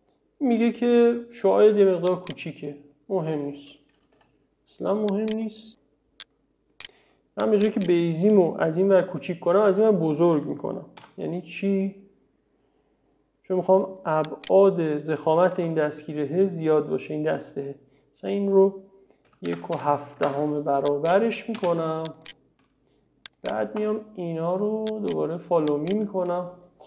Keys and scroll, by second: 4.2 e, 11.0 s, 19.1-20.3 typing, 21.6 space.